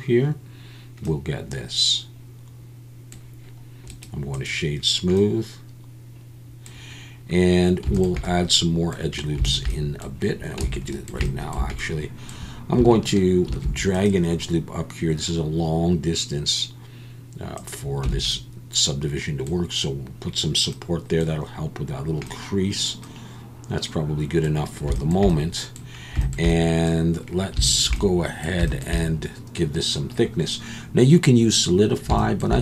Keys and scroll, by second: 10.6 Tab, 13.5 ctrl+r, 18.1 Tab.